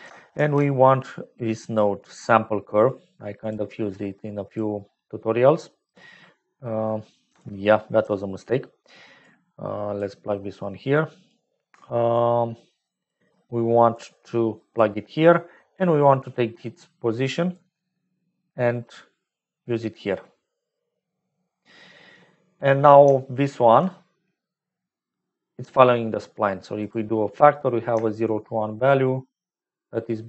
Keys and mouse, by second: 0.0 click, 0.3 shift+a, 7.4 alt+click, 8.0 typing, 9.2-10.3 drag, 10.9 click, 12.1 click, 15.1 click, 16.2 click, 23.2 shift+middle click, 27.0 click, 28.4-30.2 shift+drag.